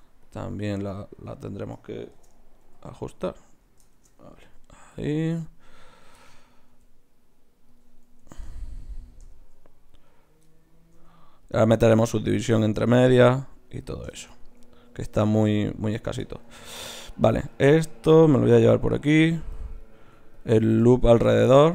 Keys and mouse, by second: 1.1 click, 2.1 shift+Tab, 2.6 g, 3.2 click, 3.9 shift+Tab, 4.4 g, 5.6-7.7 drag, 6.7 g, 8.3 ctrl+Tab, 8.3 click, 9.9-11.4 drag, 11.0 g, 12.3 g, 13.4 g, 17.0 click, 17.0-19.8 right drag, 19.8-21.7 drag.